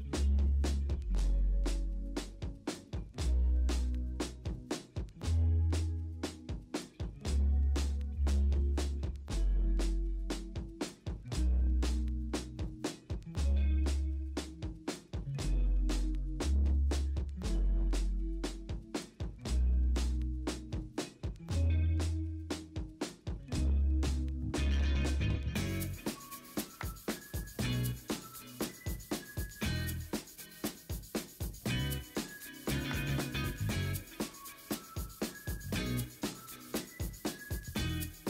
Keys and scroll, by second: 13.9 alt+Tab, 14.1 Return, 14.2 v, 15.8 v, 18.4 v, 18.8 b, 19.1 b, 19.6 x, 21.0 v, 21.3 ctrl+a, 21.7 ctrl+d, 21.9 ctrl+a, 22.7 ctrl+d, 23.2 ctrl+z, 23.4 n, 23.8 v, 24.7 ctrl+d, 25.3 m, 25.8 ctrl+t, 27.0 ctrl+d, 27.4 typing, 28.0 ctrl+z, 29.7 3, 30.7 ctrl+alt+g, 34.3 b, 34.7 0, 36.2-37.5 typing.